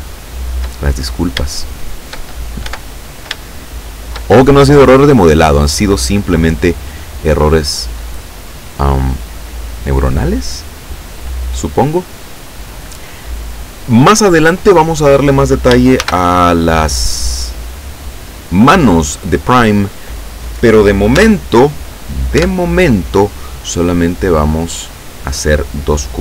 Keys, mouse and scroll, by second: 1.0-1.4 shift+scroll up 1, 1.5 shift+middle click, 2.2 shift+scroll up 1, 2.7 Tab, 3.5 shift+middle click, 16.1 shift+a, 17.9 click, 21.3 Tab, 22.5 Tab, 23.3 click, 24.8 click.